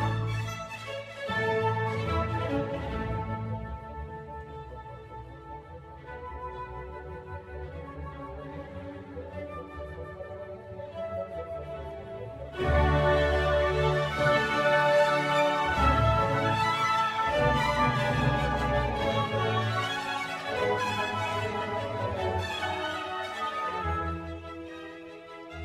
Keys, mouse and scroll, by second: 0.0-1.0 scroll up 1, 1.0-3.8 scroll down 2, 3.8 click, 4.7-5.5 scroll up 3, 5.5-9.4 middle drag, 9.4-11.6 drag, 15.3-25.6 drag.